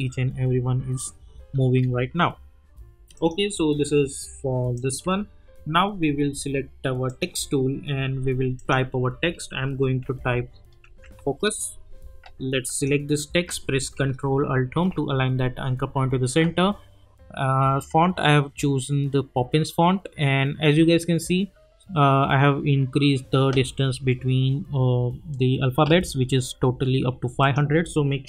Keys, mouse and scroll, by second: 1.6 ctrl+z, 3.1 click, 4.0 y, 4.7 click, 5.0 u, 7.0 click, 10.0-11.6 typing, 12.7 click, 14.7 ctrl+alt+Home.